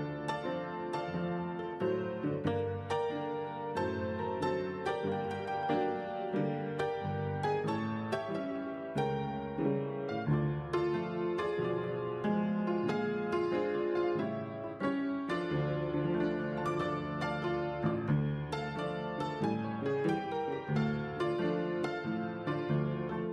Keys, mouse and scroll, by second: 3.0-4.9 scroll down 2, 6.6 scroll up 2, 12.2 Down, 12.4 Down, 16.6 Up, 19.9 Up, 20.6 Up, 21.6 Up, 22.6 Up.